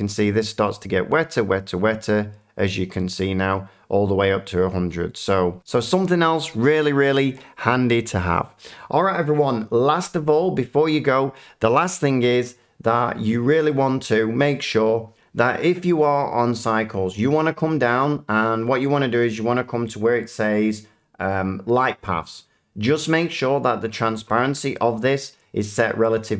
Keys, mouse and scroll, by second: 12.9 click.